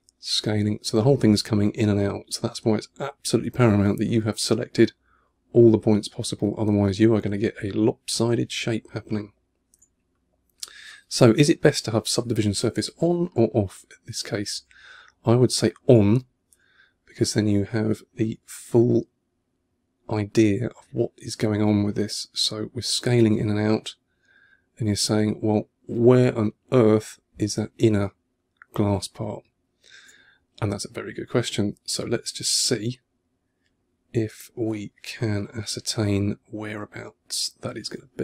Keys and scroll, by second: 3.6 super+z, 9.9 2, 10.9 1, 12.1 2, 12.8 1, 15.5-16.3 typing, 17.8 2, 27.0 2, 30.1 1, 35.2 2.